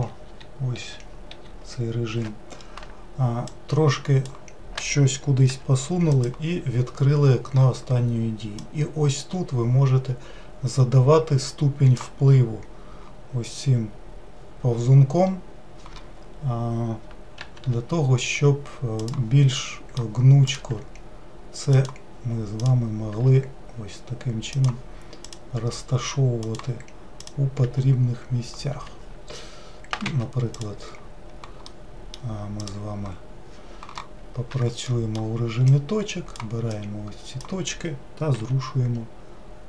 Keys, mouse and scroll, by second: 3.5-5.6 drag, 5.6 g, 8.7-11.6 drag, 17.5 g, 19.6 middle click, 20.5 click, 20.8 g, 22.7 click, 23.2 g, 25.3 click, 25.6 g, 27.2 click, 27.7 g, 30.6-31.7 drag, 31.7 middle click, 32.6-34.6 drag, 34.6 1, 34.9 middle click, 35.7-38.5 drag, 38.5 g.